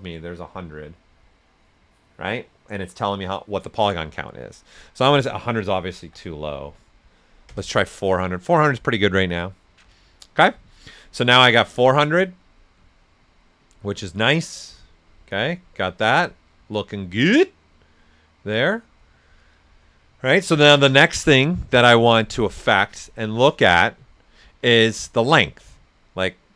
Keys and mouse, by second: 6.0-7.1 typing, 7.4 Return, 11.2 right click, 11.2 right click.